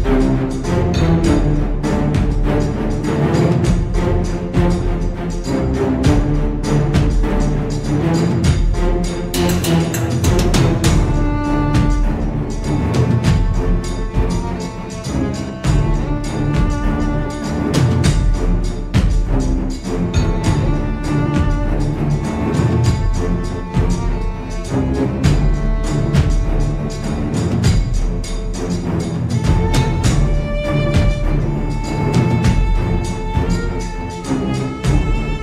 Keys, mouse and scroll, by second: 1.1 click, 1.7 ctrl+click, 4.6 click, 6.0 click, 6.9 click, 8.3 F1, 9.3 click, 11.2 click, 12.1 click, 13.9 click, 16.2 click, 17.8 click, 19.3 click, 21.2 click, 22.6 click, 24.7 click, 26.4 click, 27.7-28.2 ctrl+scroll up 2, 29.1 click, 30.6 ctrl+scroll down 2, 31.5-33.1 ctrl+shift+drag, 34.6-35.4 drag.